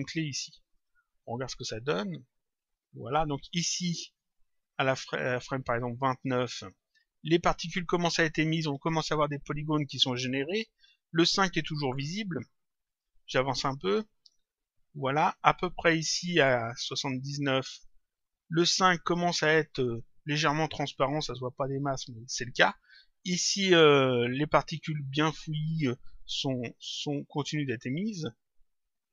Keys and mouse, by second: 0.7 click, 1.7 click, 3.1 click, 6.2 click, 12.8 click, 16.0 click, 17.7 click, 28.0 click.